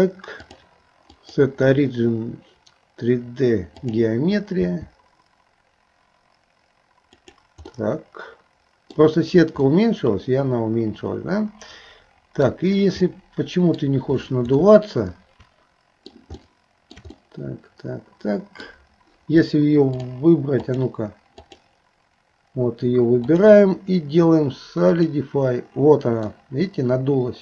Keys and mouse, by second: 0.5-4.0 drag, 4.6 s, 7.7-9.1 middle drag, 9.7-12.6 middle drag, 13.1 middle click, 14.8-16.2 shift+middle drag, 16.4 shift+middle click, 17.3-18.7 middle drag, 20.0 click, 20.7 click, 21.5 click, 23.2-25.1 drag, 26.3-27.4 middle drag.